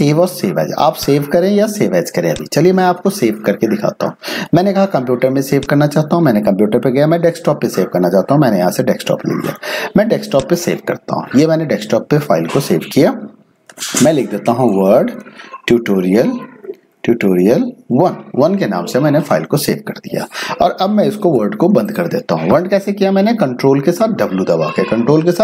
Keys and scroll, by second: 13.5-18.3 typing, 21.3 ctrl+w.